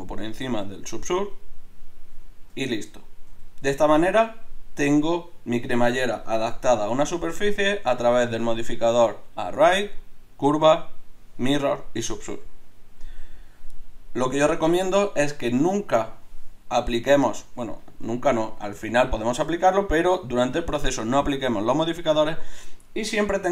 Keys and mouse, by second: 2.5 KP_Divide, 3.3 a, 3.6-6.8 middle drag, 7.4 middle click.